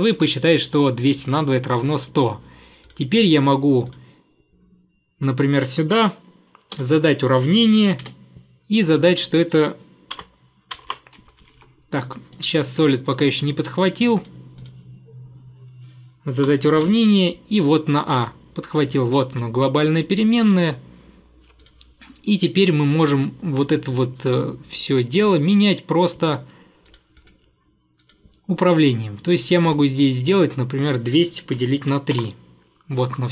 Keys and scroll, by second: 6.8 =, 8.1 ф, 10.2 BackSpace, 10.8 BackSpace, 10.9 BackSpace, 11.2 Escape, 11.5 Escape, 11.6 Escape, 12.4 Delete, 16.5-16.9 typing, 31.6 3, 32.2 Return.